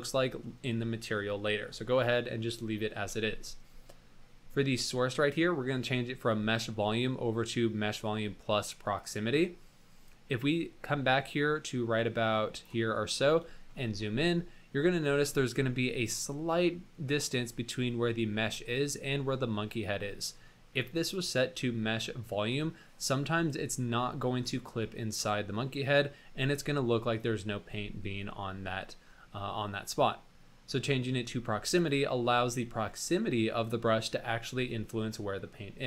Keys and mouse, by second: 10.4-12.8 drag, 13.0 middle drag, 13.6 shift+middle drag, 14.2-14.9 middle drag, 15.6-16.7 middle drag, 16.7 click, 17.5 click, 21.1-22.6 drag, 25.7 middle drag, 29.6-30.4 middle drag, 31.8 click.